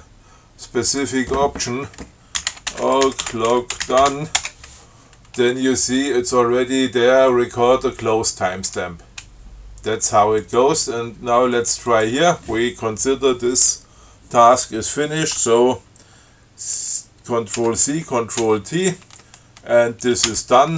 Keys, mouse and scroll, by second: 1.2 click, 2.3-4.8 typing, 10.7 click, 12.2 click, 17.8 ctrl+c, 18.7 ctrl+t, 20.6 d.